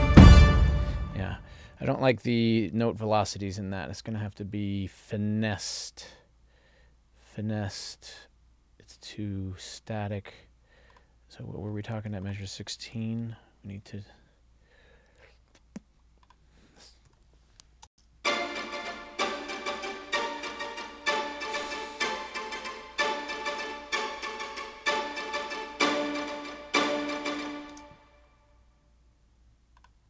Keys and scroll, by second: 0.2 space, 18.0 space, 27.9 space.